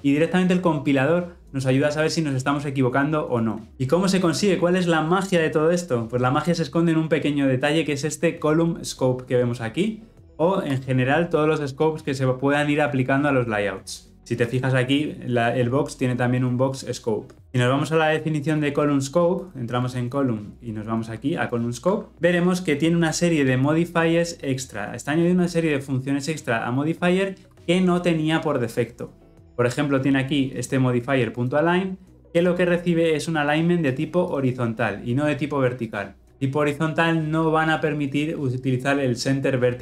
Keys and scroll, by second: 19.9 ctrl+b.